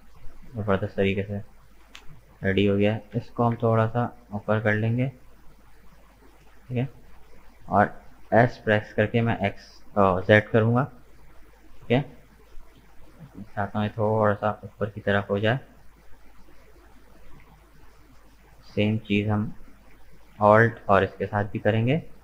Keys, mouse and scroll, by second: 1.6 alt+right click, 2.1-3.2 middle drag, 3.2 g, 6.8-8.4 middle drag, 8.4 s, 13.8-16.8 middle drag, 17.1 alt+shift+right click, 17.7 middle click, 18.6 right click, 19.9 alt+right click, 20.4-22.2 middle drag.